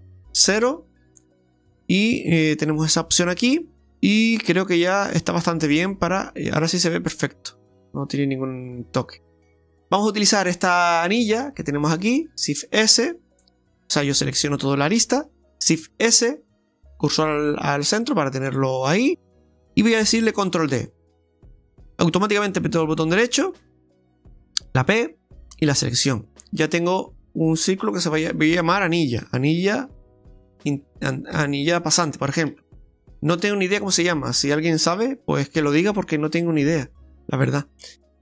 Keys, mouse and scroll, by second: 0.7 KP_Decimal, 1.7 scroll up 1, 1.9 KP_Decimal, 2.3 shift+middle click, 3.9 ctrl+z, 3.9 right click, 3.9 middle click, 3.9 scroll down 1, 5.2-5.8 scroll down 2, 5.8 Tab, 6.2 middle click, 7.4-7.8 scroll down 2, 7.6 middle click, 9.5 Tab, 9.5 shift+middle click, 9.5 shift+scroll up 1, 10.9 click, 12.1 alt+shift+right click, 15.8 shift+s, 17.7 middle click, 19.0 middle click, 19.2 middle click, 20.6 shift+d, 24.7 p, 27.8 click, 28.0 click, 30.2 l, 35.6 Tab, 36.4 right click, 37.8 Tab, 38.1 middle click, 38.1 a.